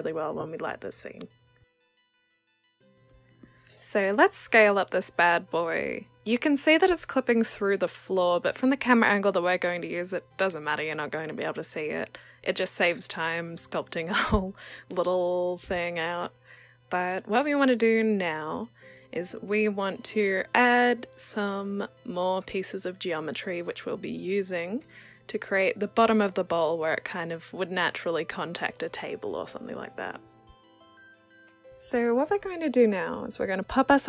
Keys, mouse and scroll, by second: 0.0-0.9 alt+drag, 2.4 r, 4.2 click, 8.3-10.9 alt+drag, 12.1 click, 13.8-16.4 drag, 17.2-19.8 drag, 21.6-23.2 alt+drag, 24.8 w, 25.3 click, 26.9-29.5 alt+drag, 30.6-34.0 alt+drag.